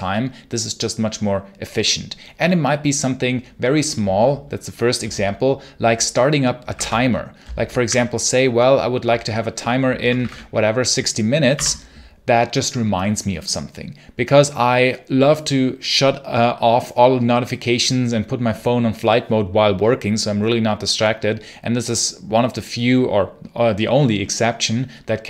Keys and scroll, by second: 6.2-7.7 typing, 9.8-10.6 typing, 11.4 Return.